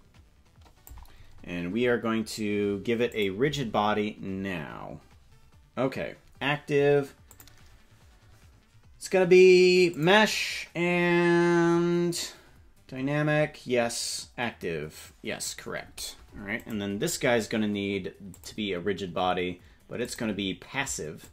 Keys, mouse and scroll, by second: 3.0 click, 7.3-9.9 drag, 16.5 right click, 18.3 click, 20.0-21.3 drag.